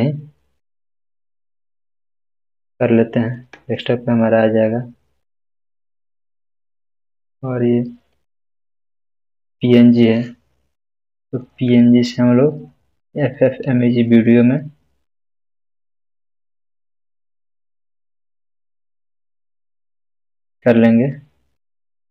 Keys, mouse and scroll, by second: 2.1 click, 2.3 click, 6.1 scroll down 1, 8.8 click, 20.0 click, 20.6 click, 21.8-22.1 scroll down 2.